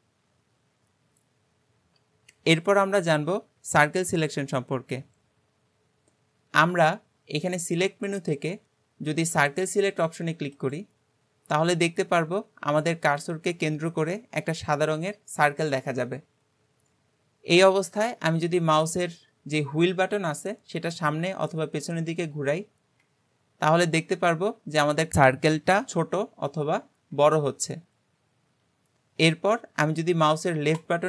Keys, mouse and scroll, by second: 7.5-10.7 drag.